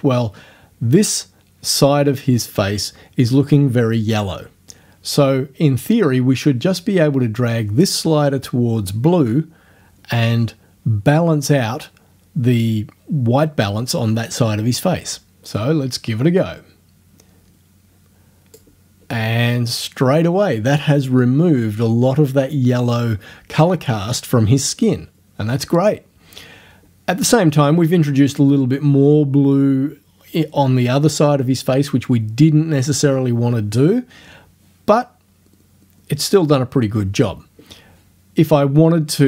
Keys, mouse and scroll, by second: 16.4 click.